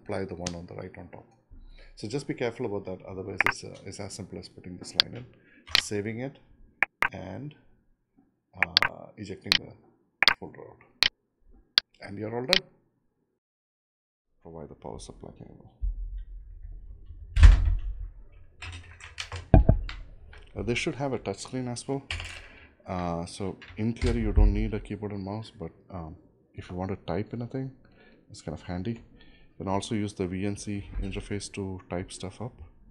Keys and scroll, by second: 6.7 ctrl+s.